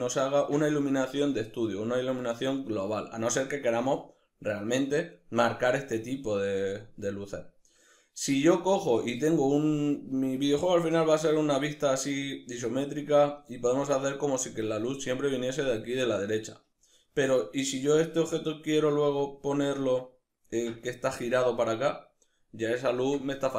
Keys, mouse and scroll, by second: 1.1-2.3 scroll up 1, 8.5-23.5 middle drag, 9.0-10.3 scroll down 2, 12.7-13.2 scroll up 2.